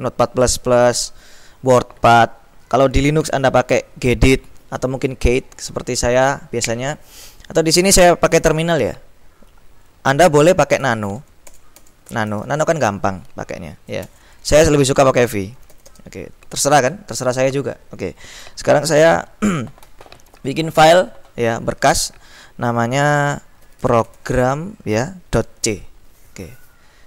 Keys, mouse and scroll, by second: 10.9-13.1 typing, 14.2 BackSpace, 15.7 v, 16.0 space, 23.5-25.8 typing.